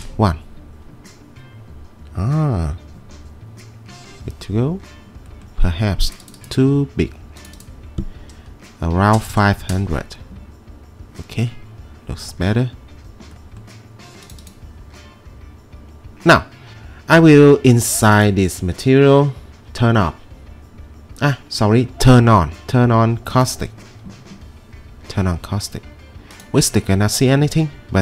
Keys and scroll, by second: 8.7-9.7 typing, 9.7 Return.